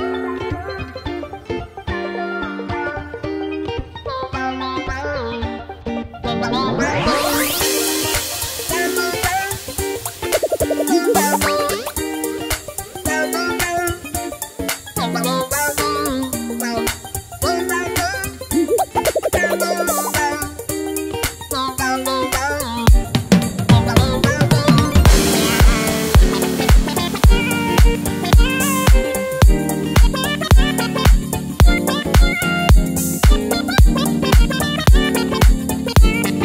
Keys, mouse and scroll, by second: 3.6 click, 8.2 click, 10.8 click, 12.0 click, 12.3 click, 13.2 click, 14.5 click, 16.5 click, 17.2 click, 18.1 click, 20.1-21.2 drag, 21.5 click, 22.1 click, 22.9 click, 23.6 click, 25.4 click, 26.6 click, 27.7 click, 28.4 click, 31.5 scroll up 2, 32.8 click, 34.1 click, 34.7 click, 35.5 click, 36.3 click.